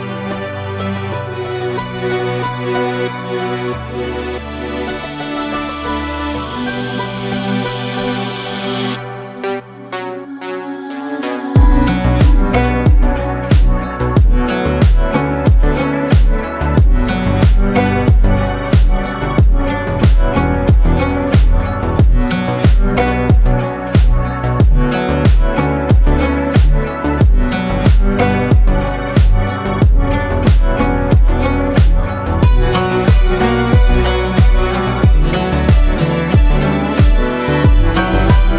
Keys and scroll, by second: 9.8 Tab, 13.9 Tab, 16.2 KP_3, 18.4 s, 18.8 x, 19.8 Escape, 20.4 a, 22.0 s, 23.6 x, 24.7 Escape, 25.3 Tab, 27.4 s, 27.6 x, 28.9 y, 30.4 z, 38.3 KP_1.